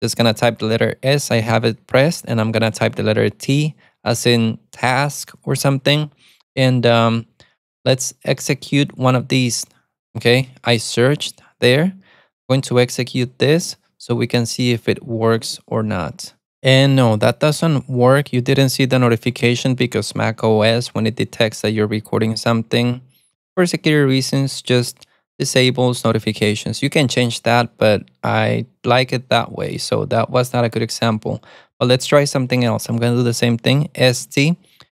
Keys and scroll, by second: 3.7 alt+super+a, 3.8 t, 8.5-9.7 typing, 15.9 Return, 34.3 alt+super+a.